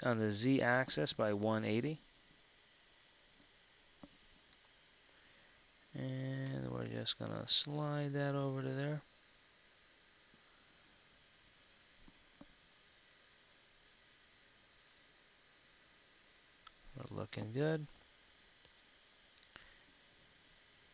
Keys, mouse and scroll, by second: 12.3 z, 17.7 KP_1, 20.5 KP_3.